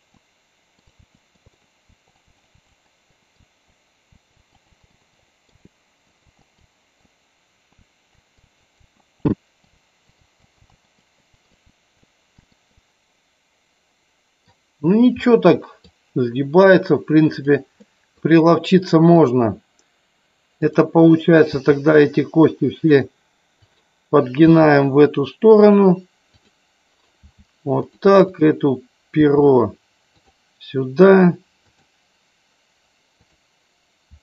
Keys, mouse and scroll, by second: 0.1 click, 0.2 middle click, 1.0-4.3 typing, 1.2 middle click, 1.5 middle click, 2.0 click, 2.3 click, 2.7 middle click, 3.1 click, 3.2 middle click, 3.7 middle click, 4.3 click, 4.6 click, 5.3 middle click, 5.5 g, 6.1 middle click, 6.2 g, 6.4 middle click, 6.6 g, 7.0 middle click, 7.8 r, 8.1 middle click, 8.5 r, 8.6 middle click, 8.8 r, 9.3 middle click, 10.1 middle click, 10.2 g, 10.4 middle click, 10.7 middle click, 11.3 middle click, 11.7 r, 12.0 middle click, 12.8-14.6 middle drag, 15.3 middle click, 18.0 middle click, 21.6 r, 23.0 click, 23.7 click, 24.6 r, 25.7 click, 27.4 r, 28.0 click, 28.4 click, 31.1 click, 31.7 click, 33.2 click, 34.1 r.